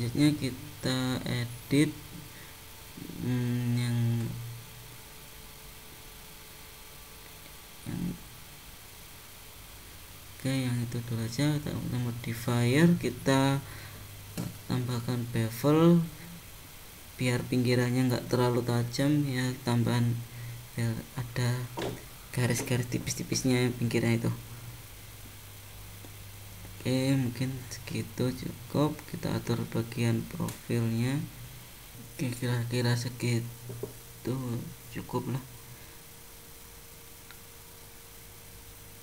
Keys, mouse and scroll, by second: 2.0 click, 3.4 click, 5.5 click, 6.4 shift+click, 9.0 click, 11.1 click, 11.8 click, 16.7 click, 17.7 click, 23.6 click, 24.7 click, 27.7 click, 30.9 click, 34.8 middle click, 35.9 scroll up 2, 36.4 middle click.